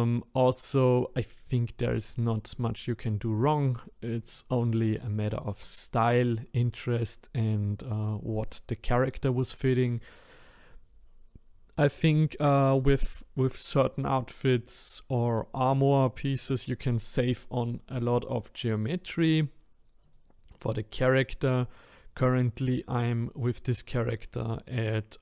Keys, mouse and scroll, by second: 0.2-2.4 scroll down 1, 4.3 click, 5.2-7.1 shift+middle drag, 7.1-7.5 scroll down 1, 7.5 scroll up 1, 20.0 click, 23.1 click.